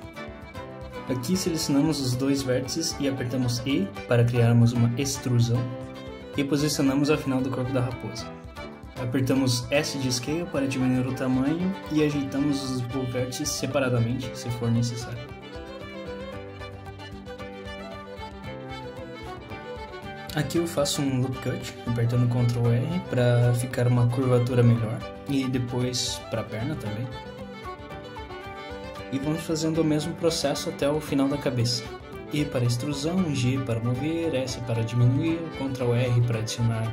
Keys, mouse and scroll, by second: 1.2 shift+click, 2.6 e, 24.9 s, 33.8 click, 34.4 g, 35.5 click, 35.8 g, 36.8 shift+click.